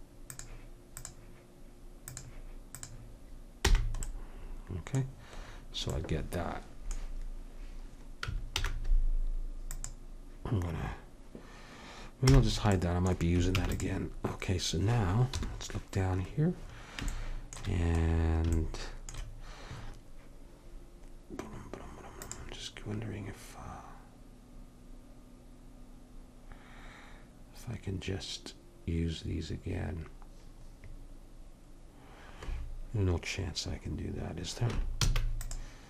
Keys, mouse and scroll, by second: 3.7 h, 4.1 middle click, 8.6 alt+h, 9.7-11.6 drag, 12.3 h, 13.6 ctrl+s, 15.4 KP_7, 22.3-26.1 drag, 35.0 shift+d.